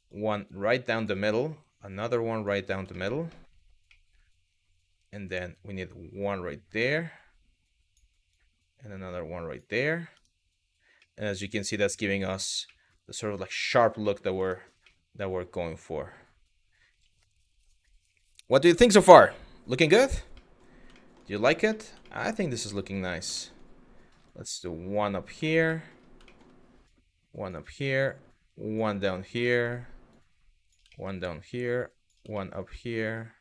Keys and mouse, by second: 1.0 click, 2.6 shift+middle click, 2.9 shift+middle click, 3.6 middle click, 4.9 click, 8.0 click, 9.8 Tab, 10.7-11.5 middle drag, 12.3 middle click, 13.8 middle click, 14.0 Tab, 14.6-16.6 middle drag, 20.1 middle click, 20.6 shift+middle click, 21.3 middle click, 21.7 shift+middle click, 22.3 middle click, 23.0 shift+middle click, 23.9 click, 25.4 middle click, 25.9 shift+middle click, 26.5 click, 27.7 click, 28.8 middle click, 29.2 shift+middle click, 29.8 click, 30.6 shift+middle click, 31.1 click, 32.1 shift+middle click, 32.5 shift+middle click, 33.1 click.